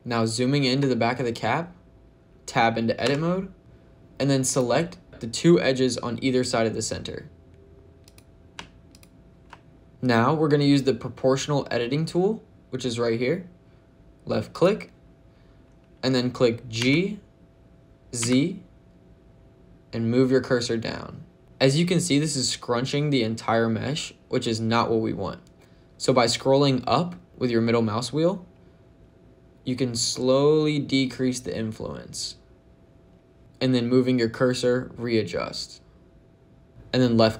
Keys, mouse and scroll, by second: 0.7 shift+middle click, 1.4-2.9 scroll up 2, 2.9 Tab, 7.9 click, 8.7 shift+click, 9.9 shift+middle click, 9.9-10.8 scroll up 3, 14.4 click, 16.6 g, 18.0 z, 28.1-29.0 scroll up 5, 29.5-30.2 scroll up 4, 30.7-31.5 scroll up 3, 31.9 scroll up 2, 33.4-35.6 scroll up 3.